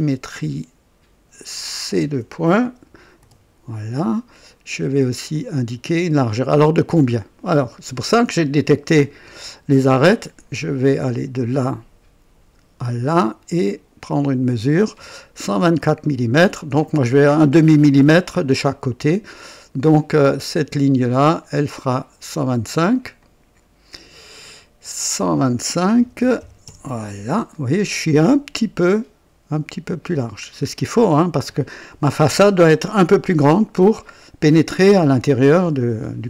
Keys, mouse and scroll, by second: 1.7 click, 3.1 typing, 5.2-7.4 drag, 11.0 click, 12.8 click, 14.1 click, 15.7-16.9 drag, 21.3 click, 23.1 click, 24.8 click, 25.9 KP_1, 26.3 KP_2, 26.3 KP_5, 26.6 Return, 28.1-28.4 scroll up 1, 28.9 right click, 30.4-30.7 scroll down 2, 30.9-31.5 right drag.